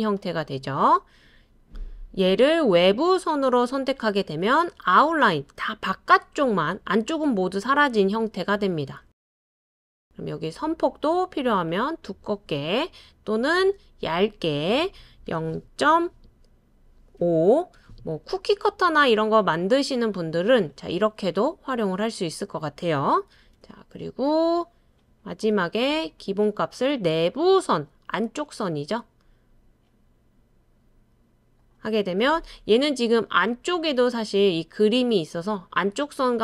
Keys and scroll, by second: 15.3-15.8 typing, 17.2 typing, 17.7 Return, 23.3 super+c, 23.5 super+v.